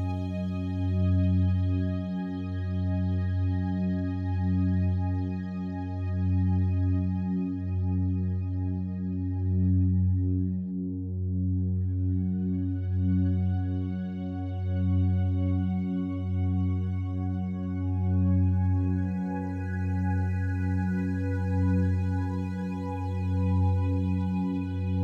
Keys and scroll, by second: 5.7 space, 10.3 space, 17.0 space, 24.9 space.